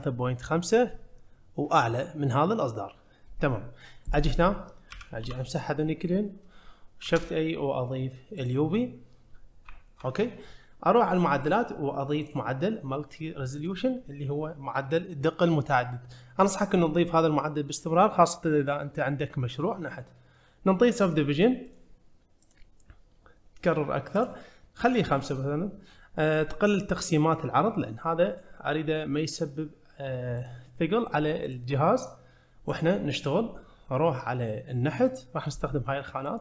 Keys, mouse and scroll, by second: 4.9 a, 5.2 x, 7.0 shift+a, 8.9-9.7 scroll up 2, 9.7 `, 10.5-11.4 scroll up 2, 11.4 click, 12.2-13.7 drag, 21.0 click, 21.4 click, 21.7 click, 22.4 click, 24.2-25.0 drag, 27.3 click, 28.0-28.7 middle drag, 30.4 click, 31.5 click, 32.0 click, 32.7 click.